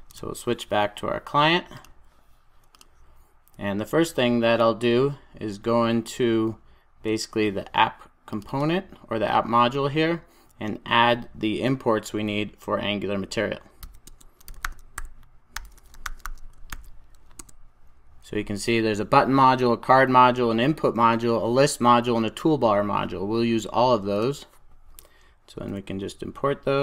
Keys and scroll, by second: 16.8 super+j, 17.8 Return, 25.5 alt+Return, 26.2 alt+Return.